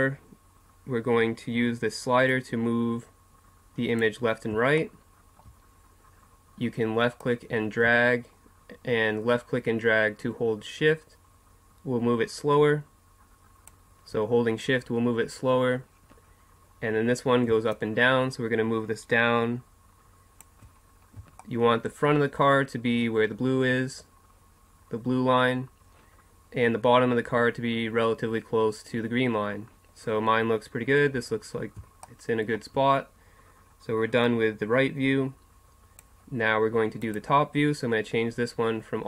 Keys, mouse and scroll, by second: 2.3-4.8 drag, 4.8-7.2 middle drag, 7.2-9.2 drag, 17.7-19.6 drag, 20.9 middle click, 22.5 middle click, 31.2-32.3 middle drag, 34.2-36.1 drag, 37.0-38.9 drag.